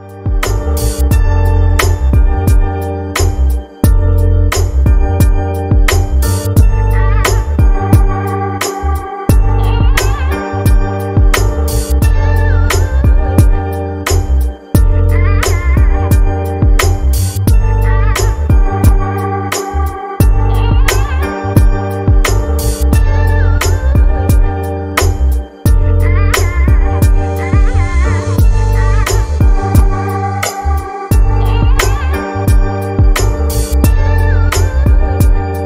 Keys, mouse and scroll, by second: 1.8-7.0 drag, 8.7 scroll down 2, 13.9-21.4 drag, 25.3-28.5 drag, 28.8-30.6 scroll down 5, 30.6-31.3 scroll down 6, 31.3-34.4 scroll down 8, 34.4 scroll down 1.